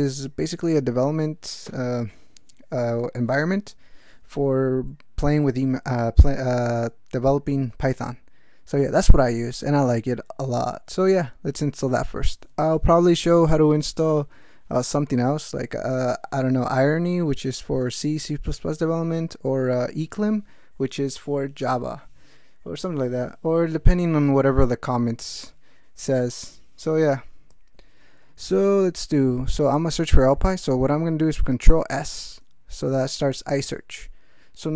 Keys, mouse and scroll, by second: 28.4 ctrl+s, 30.2 ctrl+g, 31.9 ctrl+s.